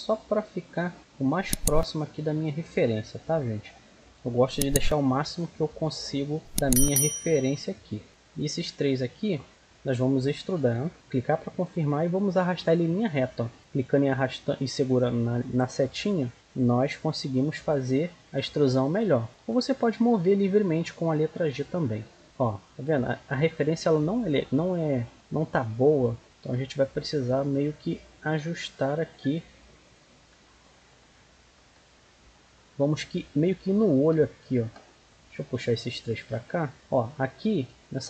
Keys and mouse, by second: 1.0 click, 1.8 click, 3.0-5.2 middle drag, 5.2 g, 6.6-9.5 right drag, 7.1 g, 9.5-10.9 middle drag, 10.9 e, 11.9-13.6 drag, 16.9 e, 18.3-19.5 drag, 19.4 g, 22.2-23.6 drag, 23.7-25.1 right drag, 24.6 click, 25.7 middle click, 29.1-32.4 middle drag, 32.4-34.2 drag, 35.0-36.7 right drag, 35.5-36.7 drag, 37.3-38.0 drag.